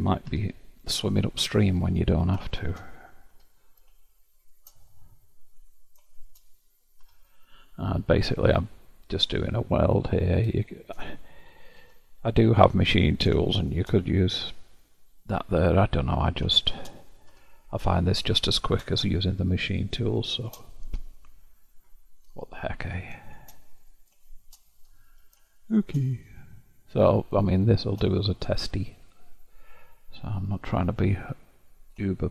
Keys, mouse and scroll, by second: 0.4 0, 0.9-2.2 middle drag, 2.2 click, 2.6 shift+click, 3.4 0, 4.0-5.7 shift+middle drag, 5.7 click, 7.1 0, 7.7-10.0 middle drag, 10.0 click, 10.7-11.9 shift+drag, 11.9 0, 13.2-14.4 drag, 14.5 0, 15.2-16.2 middle drag, 16.2 click, 16.6 shift+click, 17.4 0, 18.1-22.9 shift+middle drag, 22.9 click, 23.4 shift+click, 25.0 0, 25.6-31.0 shift+middle drag, 31.0-32.3 scroll down 1.